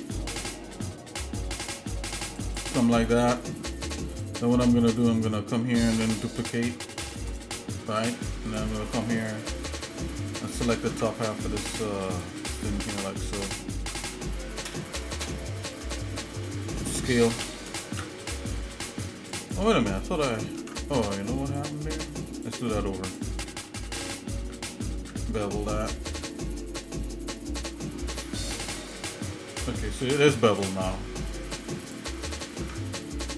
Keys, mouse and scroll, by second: 2.7 click, 3.7 click, 4.3 click, 5.0 alt+shift+click, 6.5 ctrl+b, 8.5 click, 9.2 alt+shift+click, 10.5 shift+middle click, 10.9 ctrl+Tab, 13.4 ctrl+click, 14.7 ctrl+KP_Add, 15.1 ctrl+KP_Add, 15.3 ctrl+KP_Add, 17.4 s, 20.1 shift+middle click, 20.6 ctrl+Tab, 22.4 click, 23.1 alt+shift+click, 25.0 ctrl+b, 29.8 shift+middle click, 30.5 click, 31.1 alt+shift+middle click, 31.9 alt+shift+click, 32.6 ctrl+Tab.